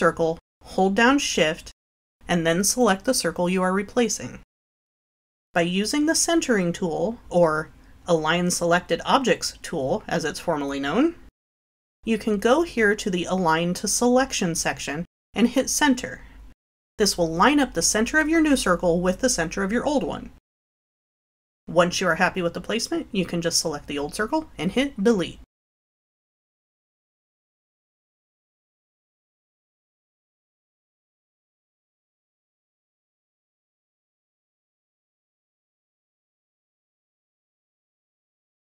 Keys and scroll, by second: 7.1 Delete, 9.4 Delete, 9.6 ctrl+v, 19.7 Delete, 29.6-31.5 typing.